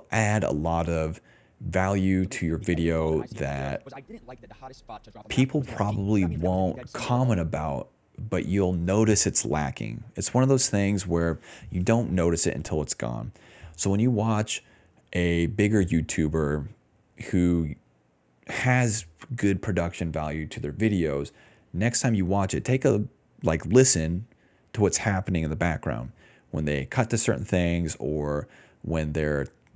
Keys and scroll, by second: 2.1 space, 3.5 s, 5.4-9.9 typing, 11.5-14.0 typing, 15.1-16.1 typing, 20.9-21.7 typing.